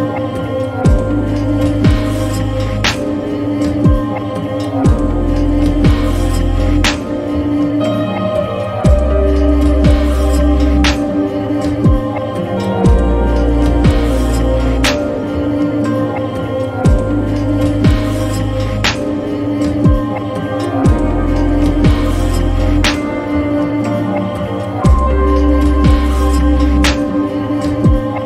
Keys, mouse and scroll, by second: 13.1 click, 17.6 click, 23.2 click.